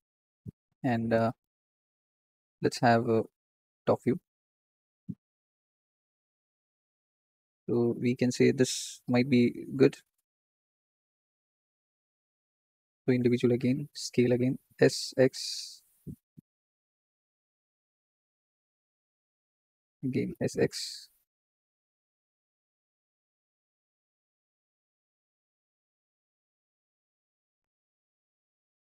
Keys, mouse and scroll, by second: 1.5 KP_7, 2.7-3.7 middle drag, 3.7 t, 5.1 KP_7, 5.8 Tab, 6.2-6.6 scroll up 2, 10.3 click, 11.4-11.9 scroll down 3, 11.9 click, 13.6-14.1 scroll up 3, 14.6 s, 18.2 scroll down 1, 18.8 ctrl+click, 20.1 s, 21.9 ctrl+click, 23.1 s, 24.9 ctrl+click, 25.9 s, 27.7 s.